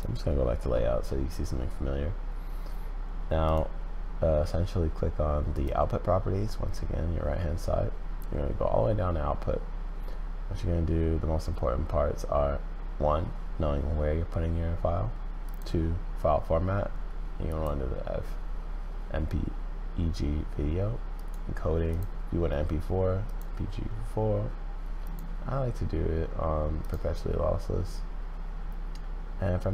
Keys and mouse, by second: 15.5-17.6 drag, 21.2 click, 21.9-23.4 drag, 25.1-26.9 drag.